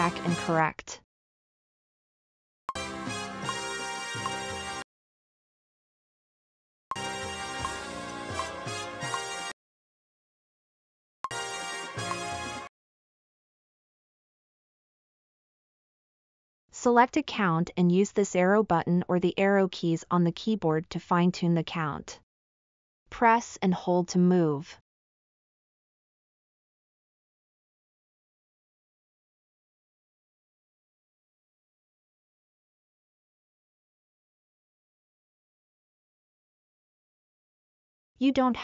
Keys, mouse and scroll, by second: 0.5 space, 2.7 space, 4.8 space, 6.9 space, 9.4 space, 11.2 space, 12.6 space.